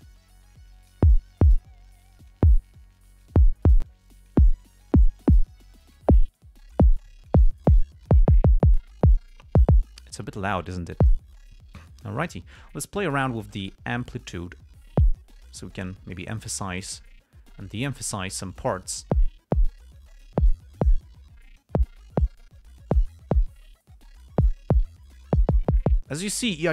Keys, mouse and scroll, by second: 0.6 click, 2.4 click, 3.1 click, 4.2 click, 5.0 click, 5.8 click, 6.7 click, 7.4 click, 8.2 click, 10.8 click, 14.0 click, 15.7 click, 16.1-18.7 drag, 18.9 click, 20.3 click, 21.4 click, 22.9 click, 24.3 click, 25.2 click.